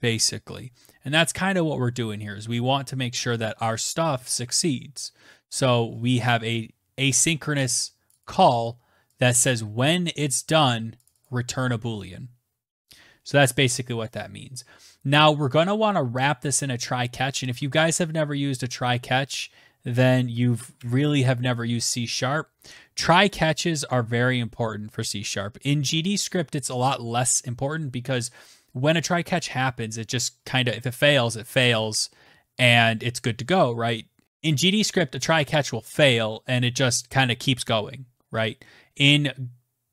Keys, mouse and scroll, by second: 7.1 click, 7.2 click, 9.6 click, 10.1 click, 10.2 click, 12.4 click, 16.4-17.7 typing, 19.2 Down, 19.7 Tab, 28.3-30.1 scroll down 1, 30.1-33.2 scroll down 1, 33.2 scroll down 1.